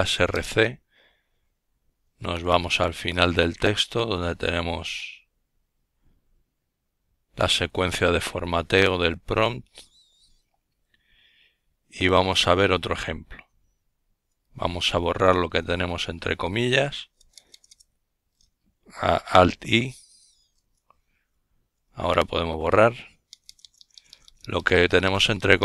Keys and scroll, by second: 0.0-0.5 typing, 9.9 Right, 10.5-12.6 typing, 13.7 typing, 16.6 alt+i, 17.8 Right, 18.3 Right, 18.5 Right, 18.7 Right, 20.8 typing.